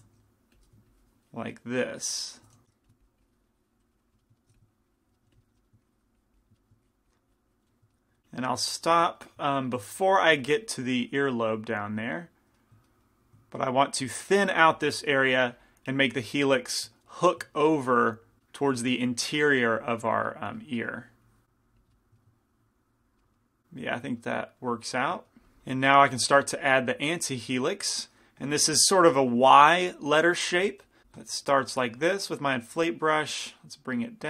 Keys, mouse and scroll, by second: 0.2 shift+f, 2.9 shift+f, 3.0-4.1 drag, 4.3 middle click, 4.6 f, 4.7 click, 5.3 f, 5.5 middle click, 5.9 click, 8.0 click, 8.9-10.8 middle drag, 10.8-13.2 drag, 13.0-15.4 middle drag, 13.8-18.4 drag, 16.7 middle click, 18.6-19.9 middle drag, 19.9-24.4 drag, 20.6-21.7 middle drag, 22.0-23.0 middle drag, 23.2-28.2 middle drag, 25.5 ctrl+z, 26.5-28.6 drag, 28.6 i, 29.3 f, 30.7 f, 31.0 f, 31.5-34.2 middle drag, 32.1-34.2 drag.